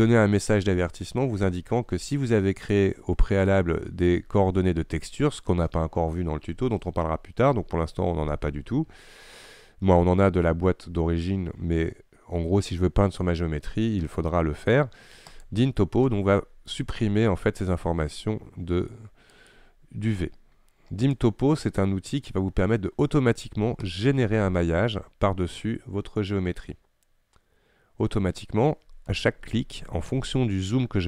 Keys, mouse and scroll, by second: 30.6-31.0 scroll up 3.